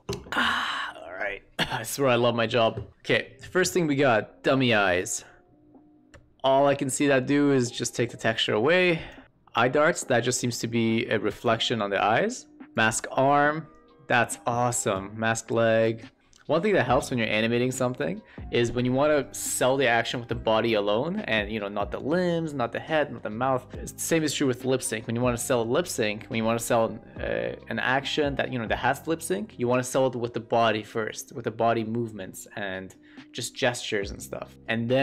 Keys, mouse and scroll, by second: 4.0-9.0 drag, 9.2-11.4 drag, 12.6-14.0 drag, 14.8-15.8 drag, 16.2-35.0 drag.